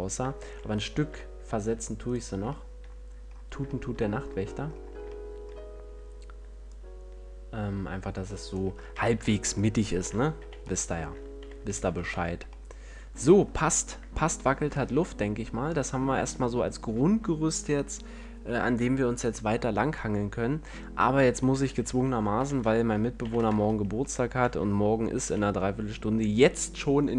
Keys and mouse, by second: 0.0 F11, 6.9-9.2 middle drag, 9.2 a, 10.7 z, 11.7 z, 12.1 a, 12.4 Tab, 23.5 z, 23.8 Tab, 24.7 Tab, 25.5 a.